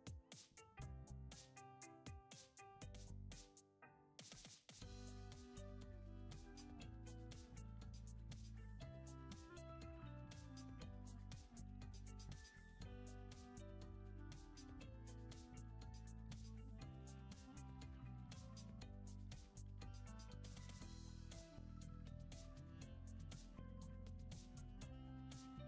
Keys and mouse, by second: 0.6 click, 0.9 shift+middle click, 1.5 shift+middle click, 2.8 ctrl+z, 2.8-5.0 drag, 7.5 click, 8.5 click, 10.4 click, 12.4 click, 14.2 ctrl+z, 15.3 click, 18.4-20.3 drag, 20.5 shift+middle click, 21.2 click, 22.9 drag, 24.2 shift+middle click, 24.8 shift+middle click, 25.2-25.6 drag.